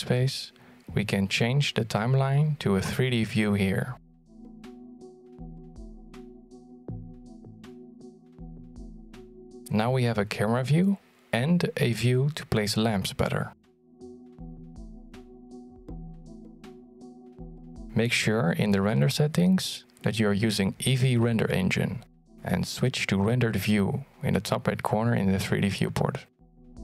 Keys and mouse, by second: 0.8-5.9 drag, 7.2-10.6 drag, 12.7-13.1 shift+middle drag, 13.6 t, 15.0 shift+middle click, 16.5 middle click, 18.0 middle drag, 18.6 shift+middle drag, 20.9-23.4 drag.